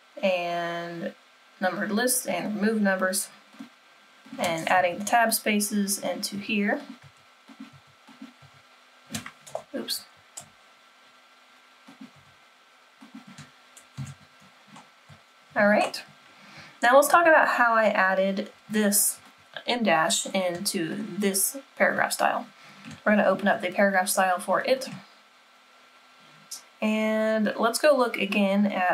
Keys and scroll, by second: 4.7 Tab, 6.3 Tab, 7.0 Tab, 7.7 Tab, 8.4 Tab, 9.5 =, 10.4 BackSpace, 12.1 BackSpace, 14.0 Tab.